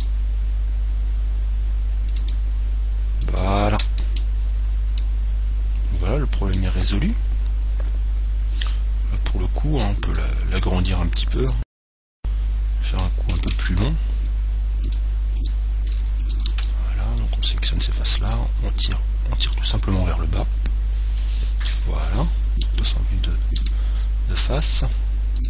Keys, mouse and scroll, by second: 0.1 right click, 2.4 g, 3.6 click, 4.2-6.9 middle drag, 7.3-8.6 middle drag, 8.6-9.2 scroll down 1, 9.2 scroll down 1, 9.4-10.4 middle drag, 12.3-14.1 middle drag, 13.6 ctrl+Tab, 15.5 right click, 16.8-18.5 middle drag, 18.3 click, 21.5-23.7 middle drag, 22.7 KP_1, 23.7 KP_3.